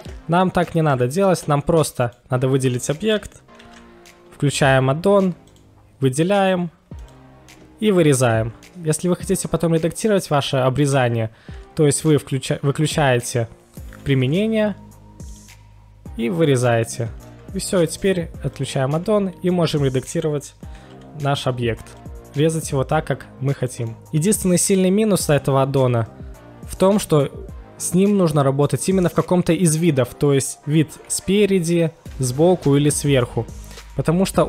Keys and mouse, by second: 0.9 KP_1, 2.0 click, 3.6 ctrl+shift+x, 14.2 q, 15.2 q, 15.3 click, 16.4 click, 16.9-17.3 middle drag, 18.0 right click, 20.5 s, 20.6 s, 21.4 middle drag, 21.4 y, 21.7 g, 22.9 click, 23.1 middle click, 27.0-27.4 middle drag, 31.0 KP_1, 32.1 KP_1, 32.1 KP_3, 32.8 KP_7, 33.9-34.4 middle drag.